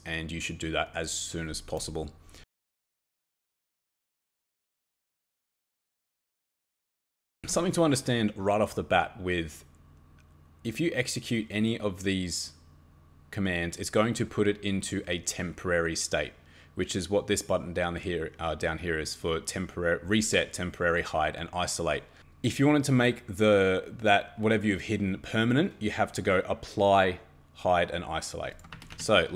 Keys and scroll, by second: 28.7 Escape, 28.9 Escape.